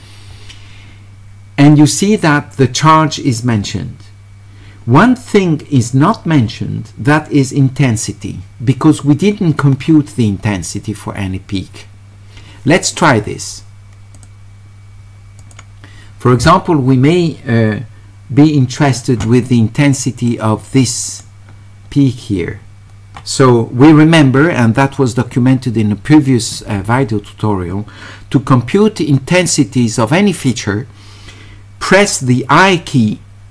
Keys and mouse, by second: 14.2 click, 15.4 click, 20.3 shift+right click.